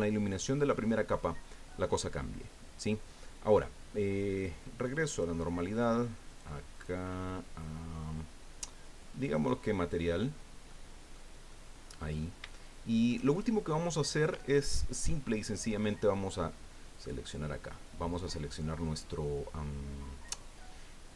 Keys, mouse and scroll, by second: 5.1 click, 6.3 click, 6.8 click, 9.2 click, 10.7 middle click, 11.5 middle click, 12.1-12.5 scroll up 2, 12.5 shift+click, 12.5 shift+middle click, 13.3 shift+click, 13.3 shift+middle click, 16.9 right click.